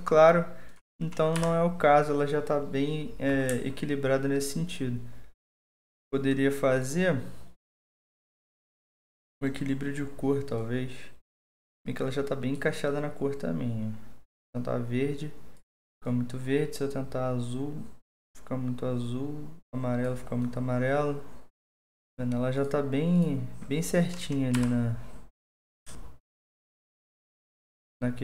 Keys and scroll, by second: 1.3 Delete, 24.5 Delete.